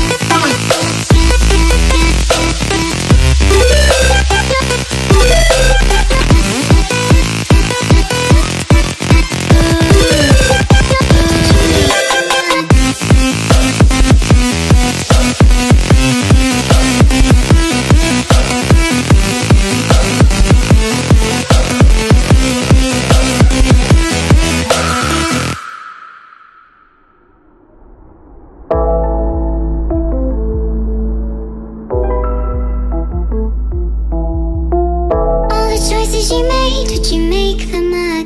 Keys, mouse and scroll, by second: 1.1 click, 2.7 click, 6.5 click, 9.3 click, 11.3 click, 11.9 ctrl+click, 13.0 click, 17.2 click, 18.1 click, 22.1 click, 23.2 click, 23.8 click, 26.0 click, 27.4 click, 30.0 click, 30.7 click, 31.9 click, 35.9 click, 36.3 click, 37.3 click, 37.7 ctrl+click.